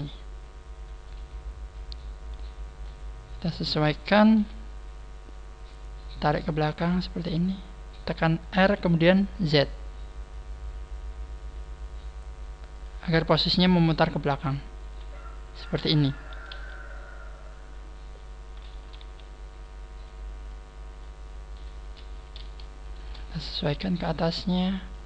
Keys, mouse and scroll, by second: 0.0 e, 2.8 middle click, 4.3 KP_1, 6.6 click, 9.7 r, 13.9 click, 13.9 middle click, 14.8 z, 15.0 middle click, 16.4 KP_3, 18.9 z, 19.6 click, 20.4 click, 22.3 right click, 22.8 shift+right click, 23.8 click.